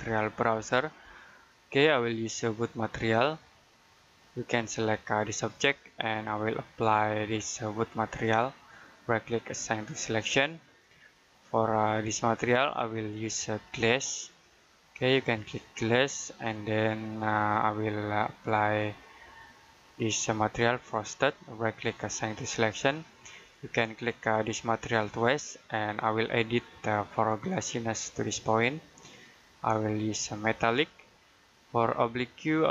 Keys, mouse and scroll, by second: 0.4 space, 2.5 click, 6.8-7.2 scroll down 1, 7.2-8.1 scroll up 1, 8.1 right click, 9.6 click, 10.6 middle click, 11.7 click, 21.2 right click, 22.2 click, 24.8 click.